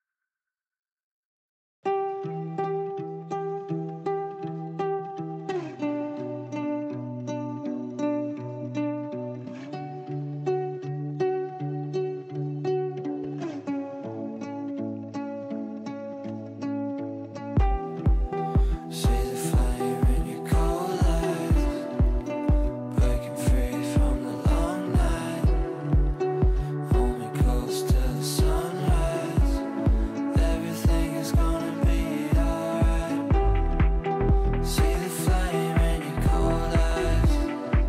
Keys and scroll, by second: 4.4 shift+F2, 4.6 Escape, 14.2 ctrl+z.